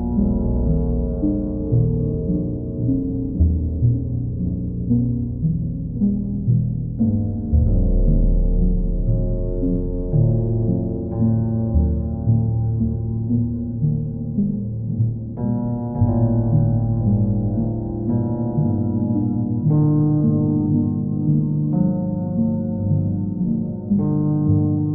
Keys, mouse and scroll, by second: 5.2 click, 6.4 click, 6.6 click, 16.2 right click, 17.0 right click, 19.8-21.0 middle drag, 21.7 right click, 22.4 right click, 24.1 right click.